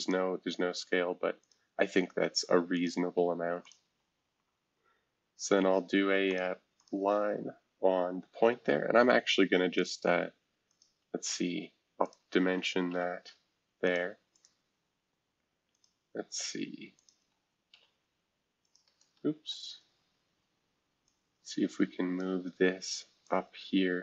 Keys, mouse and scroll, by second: 0.0 click, 1.4 shift+click, 2.7 click, 3.6 ctrl+click, 6.3 click, 6.8 click, 7.8 scroll up 2, 9.7 click, 10.7 click, 12.0 ctrl+click, 13.8 click, 14.3 click, 15.7 click, 16.9 shift+click, 17.4-18.2 typing, 18.6 click, 19.0 ctrl+z, 21.0-22.2 drag, 23.2-24.0 drag.